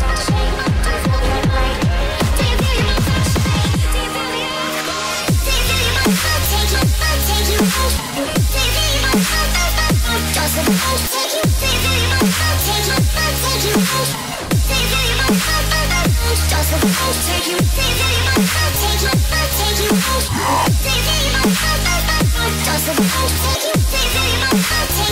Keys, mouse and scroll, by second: 1.3 click, 2.5-3.6 drag, 4.4 scroll down 2, 4.6-5.3 scroll up 3, 5.0-5.3 middle drag, 5.8 middle drag, 6.4-6.9 middle drag, 8.6 shift+a, 11.4-12.1 middle drag, 13.2 g, 14.2 y, 14.9 click, 15.2-15.6 middle drag, 16.4 g, 16.8 z, 17.4 click, 17.5-18.2 middle drag, 18.5-19.5 middle drag, 19.8 middle drag, 20.5 click, 21.9 click, 22.6-25.1 drag.